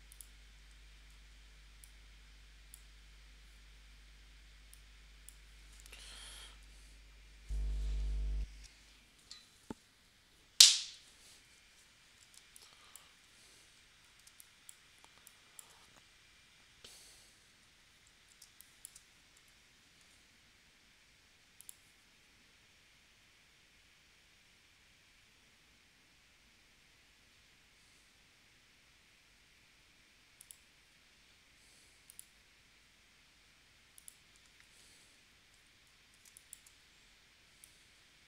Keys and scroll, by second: 12.4 space, 14.2 space, 18.4 space, 19.4 p, 34.6 shift+c, 36.3 space.